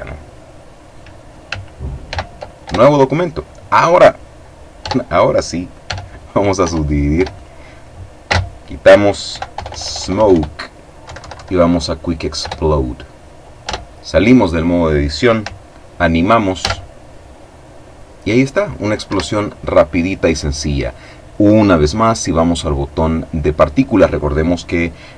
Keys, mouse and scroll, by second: 1.6 ctrl+n, 2.1 ctrl+Return, 4.4 Tab, 5.4 w, 5.7 click, 6.2 w, 6.4-7.5 drag, 7.8 space, 8.8 End, 9.1 BackSpace, 10.6 Down, 12.0 Return, 13.2 Tab, 16.2 alt+a, 18.7 Escape, 20.4-21.7 drag, 24.1 click.